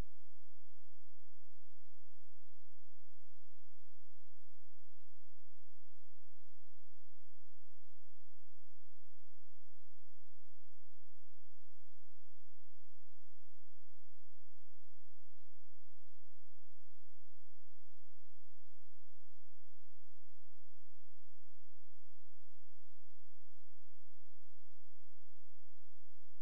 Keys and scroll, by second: 6.3 ctrl+z.